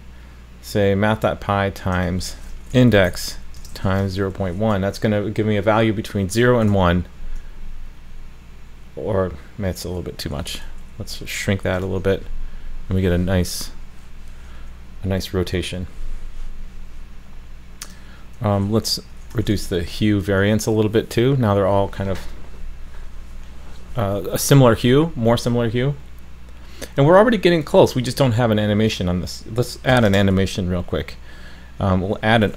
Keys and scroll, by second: 6.7 super+s, 11.8 super+s, 19.5 super+s.